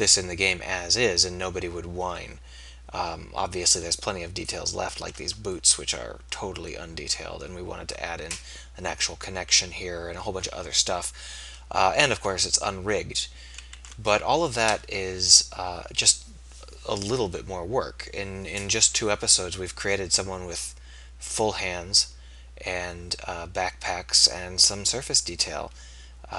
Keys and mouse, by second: 5.5-9.3 middle drag, 11.7-15.7 middle drag, 19.9-21.7 middle drag.